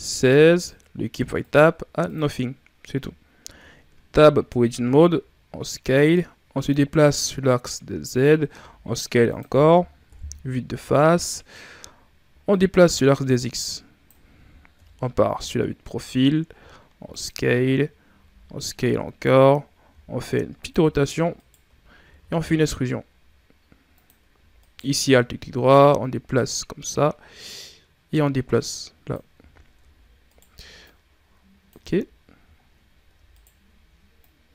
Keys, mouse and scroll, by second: 1.3-3.3 drag, 3.3 Tab, 4.7 s, 6.6-8.4 drag, 8.4 s, 10.0 KP_1, 10.9 scroll up 3, 12.4-14.6 drag, 14.6 KP_3, 15.6 scroll up 4, 16.3 s, 18.0 s, 19.8 r, 21.2 alt+right click, 22.0 e, 24.5 alt+right click, 25.6-29.2 drag, 29.2 z, 30.1 alt+right click, 30.7 click, 31.6 z, 32.4 shift+scroll up 2, 33.2 alt+right click, 34.1-34.5 drag.